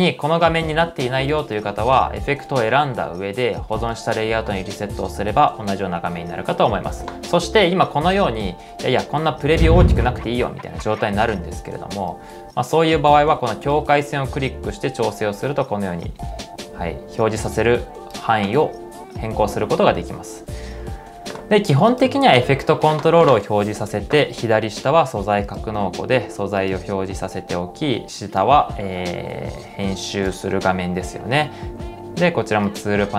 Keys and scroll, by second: 10.9-11.7 typing.